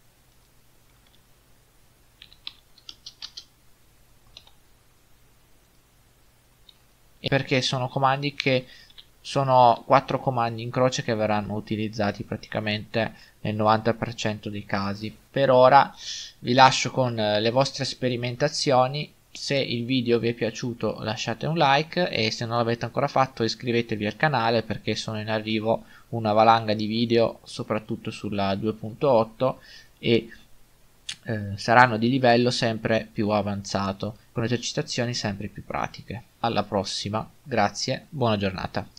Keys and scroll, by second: 2.2 e, 6.7-7.2 typing, 8.9 a, 15.0 Tab.